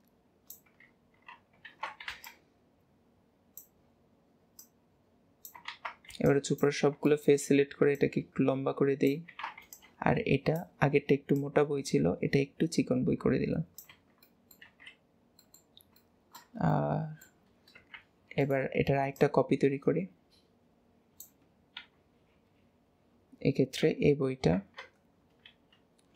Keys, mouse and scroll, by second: 4.6 click, 5.7 alt+a, 7.1 shift+middle click, 7.9 click, 9.3 alt+a, 11.3 click, 14.2-14.7 middle drag, 14.7 alt+z, 14.9-15.4 scroll down 1, 15.4-17.9 middle drag, 17.9 shift+d, 19.2 click, 21.7 KP_1, 23.9 KP_7, 24.5 Tab, 25.0-25.4 scroll up 1, 25.4 alt+a.